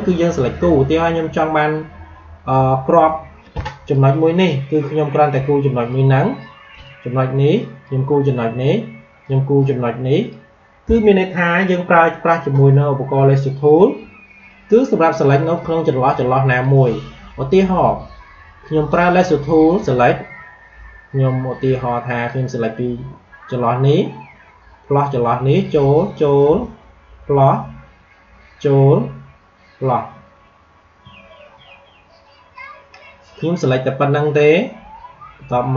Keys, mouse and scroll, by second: 15.5 space, 15.7 click, 15.9 space, 16.3 space, 22.2-35.7 drag.